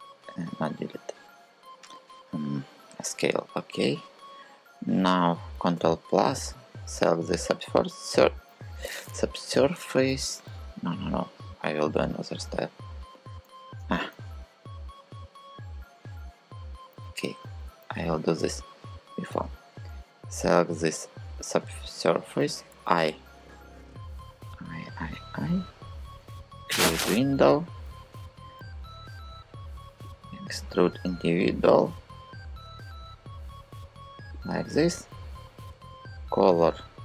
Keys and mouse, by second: 5.4 ctrl+KP_Add, 8.9 click, 13.1 super+z, 13.5 super+z, 14.3 super+z, 15.0 super+z, 16.3 super+z, 16.7 super+z, 17.3 super+z, 19.3 shift+click, 22.5 i, 25.6 click, 29.8 click, 31.3 e, 35.4 g.